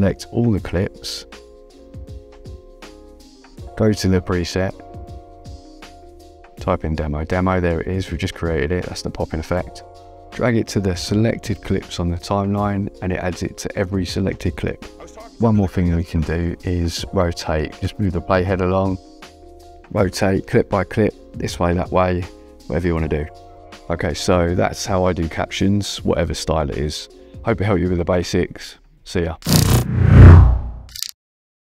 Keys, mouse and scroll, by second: 2.6 click, 4.9 click, 5.8-7.9 typing, 9.6 click, 12.5 space, 15.5 space, 16.1 =, 16.9 click, 20.3 click, 22.1 click, 24.9 click, 26.3 click, 27.9 click.